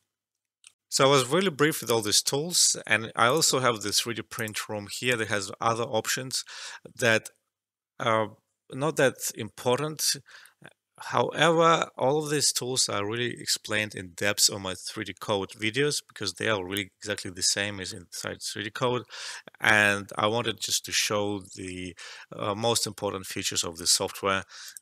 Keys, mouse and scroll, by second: 0.7 alt+F12, 3.2 click, 5.2 scroll down 1, 5.8 scroll down 1, 6.6 scroll down 1, 9.0 scroll up 1, 9.9 scroll up 1, 10.5 scroll up 1, 11.4 scroll up 1, 12.8 scroll down 1, 14.4 scroll down 1, 15.9 scroll down 1, 17.3 scroll down 1, 19.0 scroll down 1, 20.2 scroll up 1, 24.6 click.